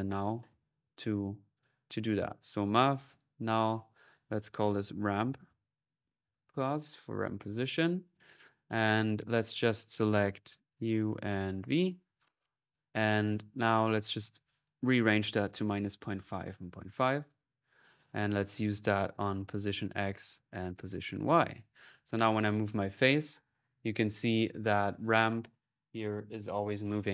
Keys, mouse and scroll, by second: 0.5-1.2 typing, 1.4 click, 2.3 click, 2.9 alt+n, 3.2-5.0 alt+drag, 3.7 alt+n, 7.2 click, 7.9 click, 9.5 click, 10.5 ctrl+z, 10.5-12.2 ctrl+drag, 12.4 click, 13.1 click, 13.7-15.2 drag, 17.0 click, 17.7-19.4 drag, 19.5 click, 20.6 right click, 20.8-22.8 drag.